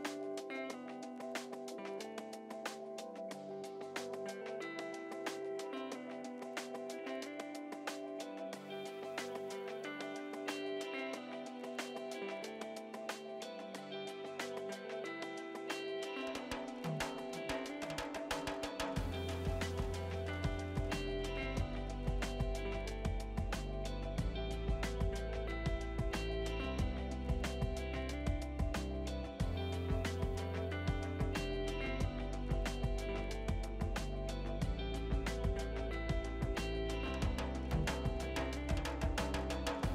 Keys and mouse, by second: 2.3 click, 4.2 Delete, 4.9 click, 4.9 Delete, 5.1 click, 5.2 Delete, 5.3 click, 6.2 click, 14.2 click, 15.1 Pause, 15.2 click, 26.1 ctrl+shift+x, 26.5 KP_2, 26.8 BackSpace, 26.9 KP_1, 27.2 Return, 27.6 click, 27.9 ctrl+shift+x, 28.0 click, 28.7 KP_1, 29.0 Return, 29.8 click, 30.4 Delete, 30.6 click, 30.6 Delete, 31.1 click, 31.2 Delete, 31.2 click, 31.3 Delete, 31.4 click, 31.4 Delete, 31.7 click, 31.8 Delete, 31.9 click, 32.0 Delete, 32.4 click, 32.5 Delete.